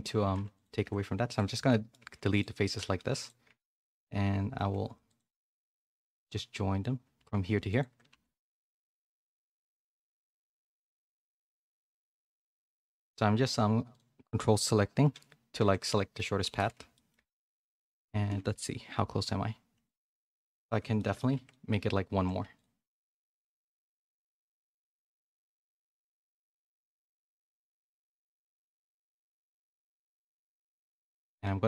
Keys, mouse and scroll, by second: 0.5 ctrl+click, 0.8 x, 1.6 middle click, 2.0 2, 2.3 click, 3.1 shift+click, 3.5 f, 3.8-5.1 middle drag, 5.1 click, 5.9 ctrl+click, 7.7 ctrl+click, 8.1 f, 8.3 middle click, 9.3 click, 10.0 click, 10.8 ctrl+click, 11.9 click, 12.8 ctrl+click, 15.8 middle click, 16.6 a, 16.7 a, 16.9 middle click, 17.1 Tab, 17.5 a, 17.6 middle click, 18.5 KP_1, 19.8 click, 20.1 middle click, 20.9 shift+middle click, 21.3 Tab, 21.4 middle click, 22.1 2, 22.4 3, 22.5 click, 23.3 shift+click, 23.5 x, 24.0 middle click, 24.2 2, 24.8 shift+middle click, 25.7 shift+click, 26.0 f, 26.2 middle click, 26.4 2, 27.1 shift+click, 29.1 click, 29.6 middle click, 31.1 click.